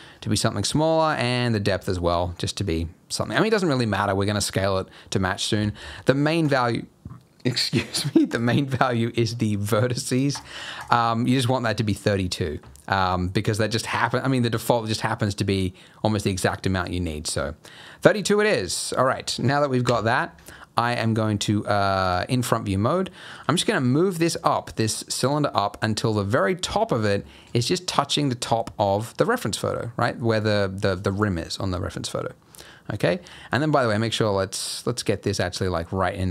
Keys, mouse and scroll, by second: 0.1-1.0 scroll up 6, 1.0 scroll up 3, 1.2 click, 3.6-4.2 scroll up 6, 6.4 middle click, 6.4 click, 10.3 click, 13.2 middle click, 15.1 middle click, 16.9-18.0 scroll down 1, 18.0 middle click, 18.4 middle click, 18.9 scroll down 2, 19.1 middle click, 19.8 KP_1, 20.4-21.5 scroll up 3, 22.0 click, 22.5-22.8 scroll down 2, 23.3 g, 26.8 scroll up 4, 27.2 shift+middle click, 27.5-28.7 scroll up 1, 28.7 g, 32.4 scroll down 3, 32.7 middle click, 33.1 scroll down 3, 33.3 middle click, 33.9 g, 35.9 middle click.